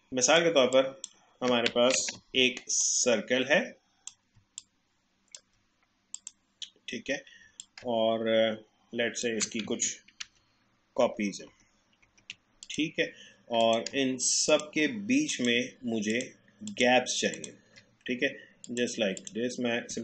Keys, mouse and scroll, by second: 1.9 ctrl+z, 2.8-6.1 drag, 7.6-10.2 alt+drag, 10.2 ctrl+d, 12.6 click, 14.5 shift+click, 18.7 click.